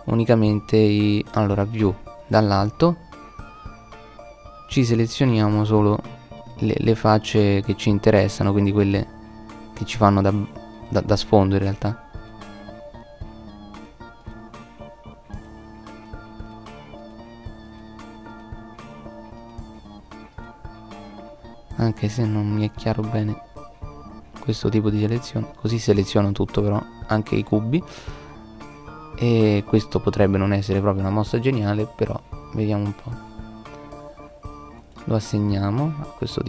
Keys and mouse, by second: 1.1 middle click, 1.6 middle click, 4.3 middle click, 6.1 right click, 12.6-14.4 drag, 18.7 middle click, 19.5-20.7 drag, 20.8-22.6 drag, 24.6 click, 27.2 middle click, 34.7 middle click.